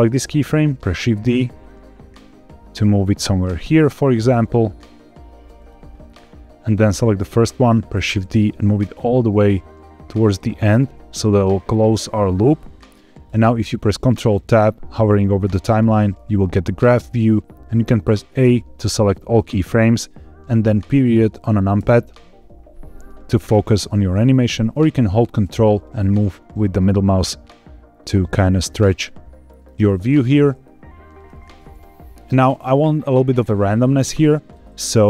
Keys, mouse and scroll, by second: 0.8 shift+d, 5.5 click, 6.8 click, 7.9 shift+d, 11.8 click, 12.5 click, 15.4 ctrl+Tab, 18.3 a, 21.7 KP_Decimal, 23.2-23.7 scroll down 4, 23.8 shift+middle click, 25.5-29.5 ctrl+middle drag, 29.6 ctrl+scroll down 1, 29.9-30.4 scroll up 3, 30.5 shift+middle click.